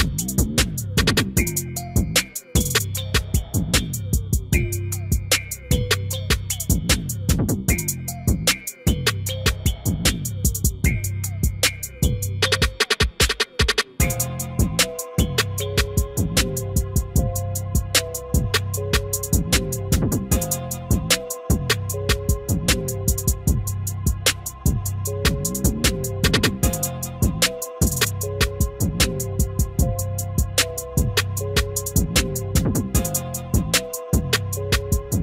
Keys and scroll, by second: 2.8 ctrl+z.